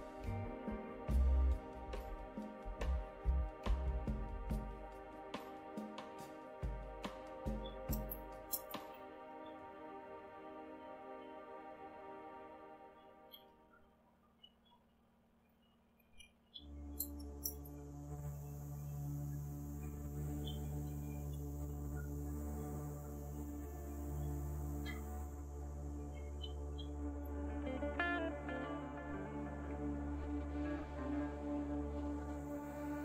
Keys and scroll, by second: 7.6-10.2 typing, 12.7-17.4 typing, 18.7-22.2 typing, 25.0-27.7 typing.